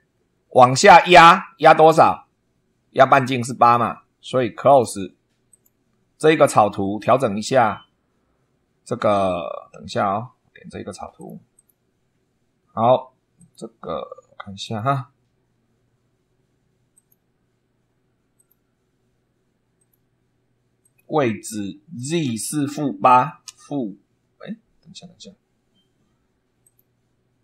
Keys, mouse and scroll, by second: 5.4 click, 11.1 click, 11.5 click, 13.3 click, 14.6 click, 16.8 click, 18.3 click, 19.7 click, 20.7 click, 21.9 click, 23.4 -, 24.0 8, 26.6 click.